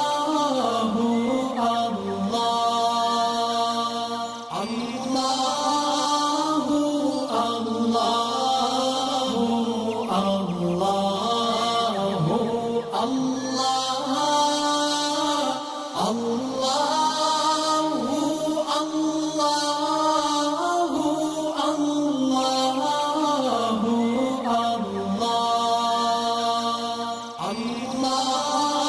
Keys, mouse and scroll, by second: 0.0 shift+click, 1.0 ctrl+g, 1.5-3.4 alt+drag, 3.4-3.9 alt+scroll up 2, 4.7-6.2 alt+shift+drag, 6.8-7.2 alt+scroll down 2, 7.2 click, 7.9 alt+scroll down 2, 8.4 space, 8.5 click, 9.2 click, 9.3 shift+click, 10.9-12.4 alt+drag, 12.4 right click, 13.3 click, 16.6 alt+scroll up 1, 17.3 click, 18.5 right click, 19.6 click, 24.3 alt+scroll down 1, 24.8 alt+scroll up 1, 25.5 click, 25.8 right click, 26.6 click.